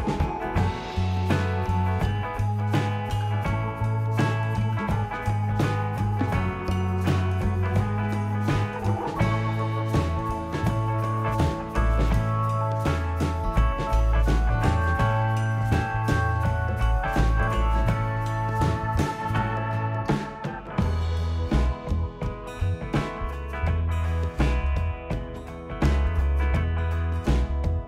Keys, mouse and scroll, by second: 0.9 click, 1.8 click, 3.4 click, 4.0 click, 4.5-5.1 scroll, 5.1 middle click, 6.3 click, 7.1 click, 7.9 scroll, 7.9-8.4 typing, 9.5 click, 10.0 scroll up 1, 10.0-10.9 scroll, 10.9 click, 11.1 scroll up 2, 11.9 click, 12.7 click, 12.7-13.7 scroll up 2, 13.8 scroll, 13.9 click, 15.3 click, 15.7 click, 19.6 e, 21.3 s, 25.6 click, 25.6 middle click, 26.4 click.